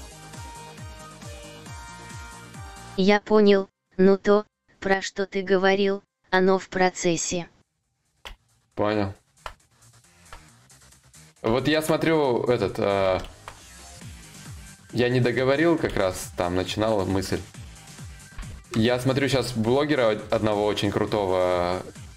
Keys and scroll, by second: 7.9 ctrl+z, 8.1 ctrl+y, 8.9 ctrl+z, 9.7 ctrl+z, 15.5 ctrl+z.